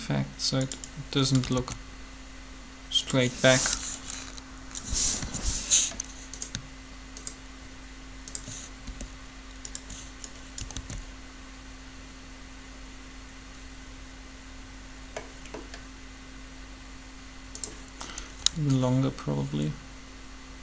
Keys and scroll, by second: 1.5 alt+a, 5.2 7, 8.9 shift+r, 10.7 alt+a, 18.4 g.